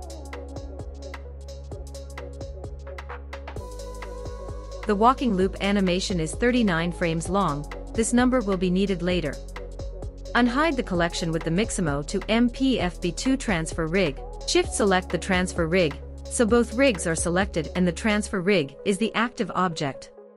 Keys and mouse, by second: 1.6 space, 3.0 space, 3.9 click, 4.1 click, 4.3 click, 5.7 middle click, 6.1 click, 7.3 Left, 12.4 click.